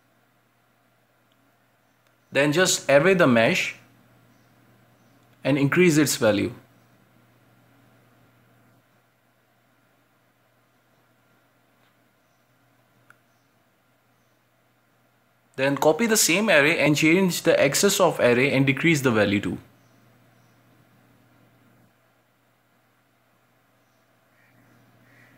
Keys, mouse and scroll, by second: 0.5-2.3 middle drag, 2.3 scroll down 1, 2.6 middle click, 3.6 click, 4.2-6.1 drag, 8.0-11.4 drag, 11.5 scroll down 4, 11.8-14.0 shift+middle drag, 14.0-15.0 drag, 15.3 scroll down 2, 15.5-16.5 shift+middle drag, 16.5 g, 19.0-25.3 drag.